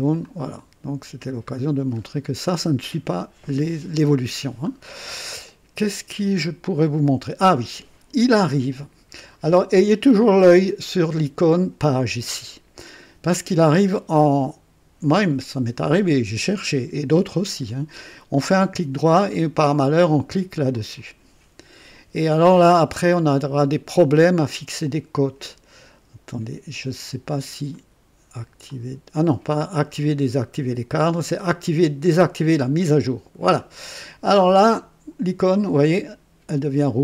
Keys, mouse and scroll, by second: 0.2-1.3 drag, 1.5-2.2 scroll down 2, 3.8-4.1 scroll down 1, 5.4-6.4 middle drag, 7.1-7.6 scroll down 2, 18.4 right click, 20.7 click, 27.7 right click, 28.7 click, 29.6 right click, 33.0 click.